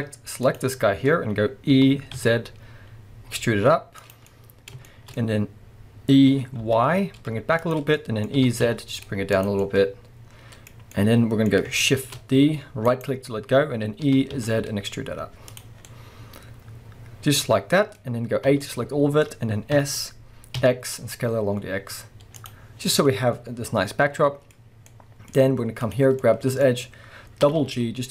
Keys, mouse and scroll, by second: 0.4 click, 1.7 e, 4.2 click, 4.3-7.7 middle drag, 6.2 e, 7.7 click, 7.9-9.5 middle drag, 8.4 e, 9.5 click, 9.6-13.1 middle drag, 12.0 shift+d, 13.1 right click, 14.1 e, 15.6 click, 15.8 scroll down 1, 15.9-22.5 middle drag, 18.0 scroll up 1, 18.5 a, 19.7 s, 22.5 click, 22.7 scroll down 1, 22.9-25.8 middle drag, 24.5-24.9 scroll up 1, 25.3-25.8 scroll up 1, 25.8 click, 26.2-28.1 middle drag, 27.4 g.